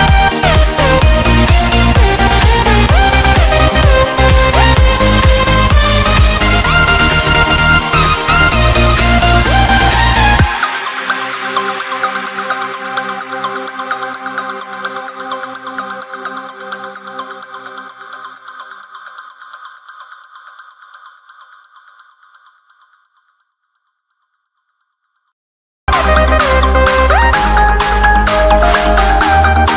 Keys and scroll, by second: 0.5 F2, 3.5 c, 3.9 F3, 5.9 shift+F2, 6.5 shift+Page_Up, 6.9 F3, 8.7 Escape, 9.7 Delete, 16.2 shift+o, 16.4 r, 17.7-20.0 typing, 20.7 ctrl+space, 25.7 c, 26.0 Escape, 29.4 Escape.